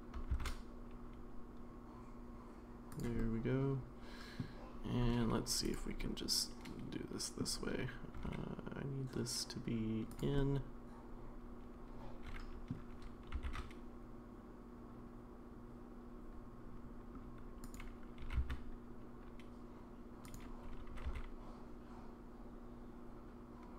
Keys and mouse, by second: 3.2-4.4 middle drag, 5.6 click, 6.0-7.4 middle drag, 8.1 g, 10.4-12.7 middle drag, 13.3 r, 18.2 g, 21.0 r.